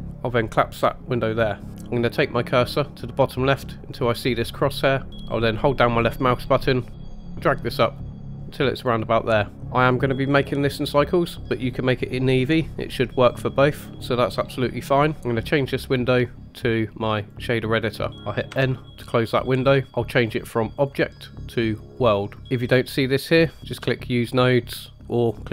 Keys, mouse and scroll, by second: 0.7 click, 5.5-8.8 drag, 10.8-12.7 drag, 15.4 click, 18.5 n, 20.7-22.0 drag, 22.3-22.7 scroll up 4, 23.5 click, 23.6 click.